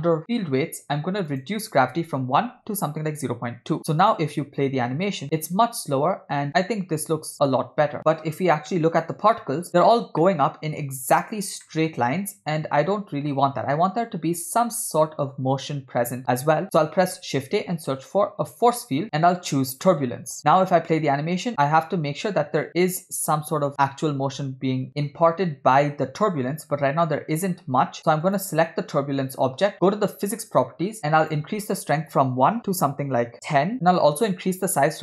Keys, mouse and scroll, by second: 0.2 click, 1.3-3.1 drag, 4.1 click, 4.4 space, 9.3-9.7 drag, 9.7 space, 10.2-10.8 middle drag, 11.7 middle click, 15.9 space, 17.0 shift+a, 20.4 click, 20.6 space, 24.9 click, 25.1 space, 26.9-27.5 scroll up 2, 27.5 space, 28.3 click, 30.4 click, 31.2-33.3 drag, 33.7-35.0 drag.